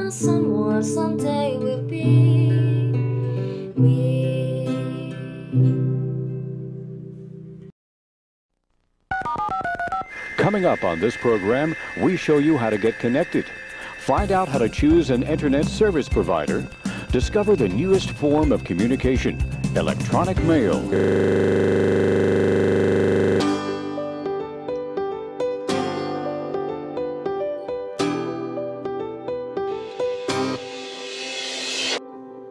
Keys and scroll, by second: 14.3 p.